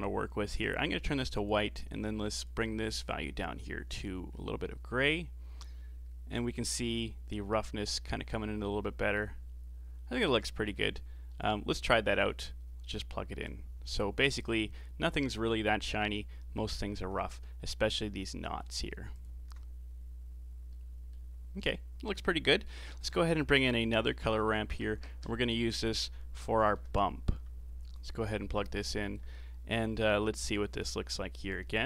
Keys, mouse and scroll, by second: 1.3 click, 1.8 click, 2.3 click, 11.2-13.4 middle drag, 13.4-16.4 drag, 19.2 ctrl+shift+click, 20.7-21.7 middle drag, 21.7 click, 22.4 middle click, 22.9 shift+a, 28.5-30.4 alt+right drag, 30.4 ctrl+shift+click.